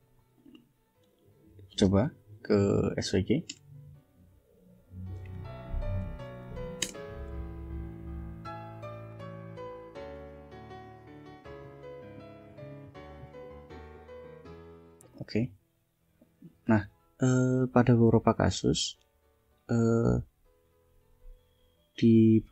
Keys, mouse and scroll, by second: 0.2 click, 2.1 4, 3.4 Return, 5.7-6.8 typing, 14.9 click, 17.9-19.7 drag.